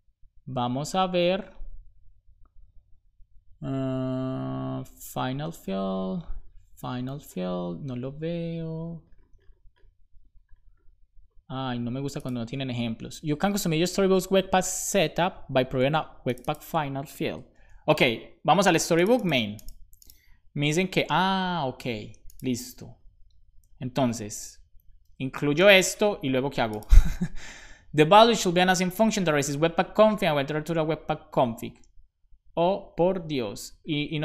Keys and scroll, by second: 24.1 ,, 24.6 Return, 25.0 super+v, 25.3 shift+;, 25.5 space.